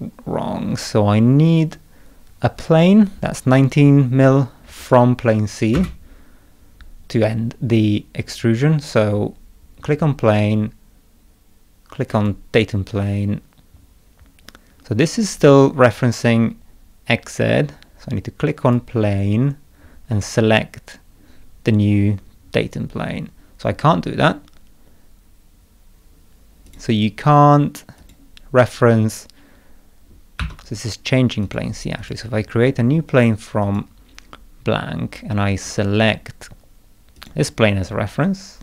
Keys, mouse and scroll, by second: 4.8 click, 5.7 space, 12.1 click, 18.6 click, 26.6 click, 27.9 click, 30.4 Escape, 31.4 click, 32.0 click, 33.6 click, 35.5 click, 37.1 click.